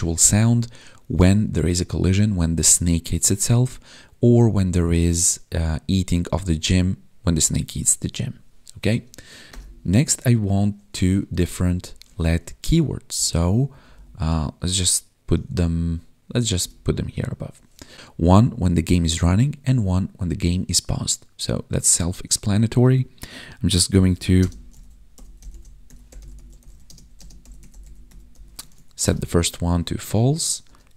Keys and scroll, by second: 11.3 Delete, 13.1 Down, 13.6 Up.